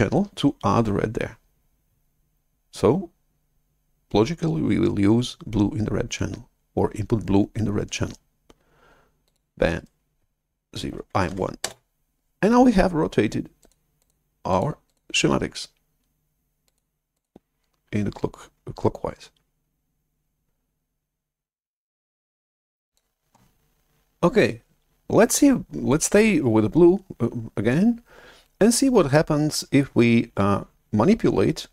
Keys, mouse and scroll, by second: 0.5 typing, 9.2-11.2 drag, 9.7-11.2 right drag, 11.2 1, 11.5 Return, 13.5 click, 14.4 click, 14.8 click, 16.6 click, 17.1 click, 22.8-25.4 drag.